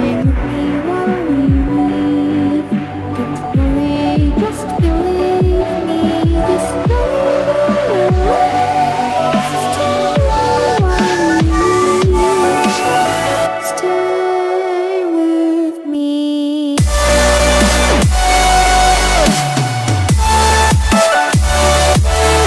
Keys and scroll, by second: 4.6 ctrl+alt+z, 14.8 Return.